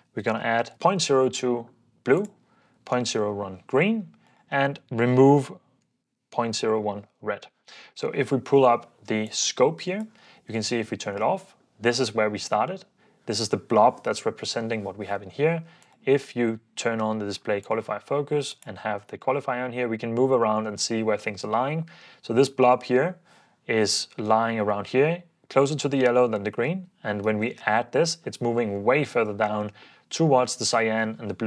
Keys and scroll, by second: 0.2-1.2 typing, 2.7-3.5 typing, 5.8-7.9 typing, 7.9 shift+super+w, 10.5 super+d, 27.3 super+d.